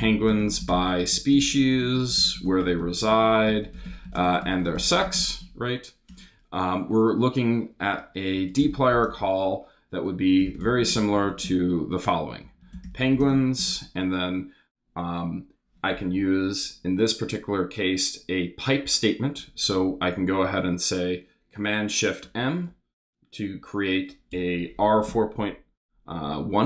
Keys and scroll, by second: 0.0-6.1 typing, 6.1 Return, 7.8-13.8 typing, 22.3 shift+super+m, 24.3 Return.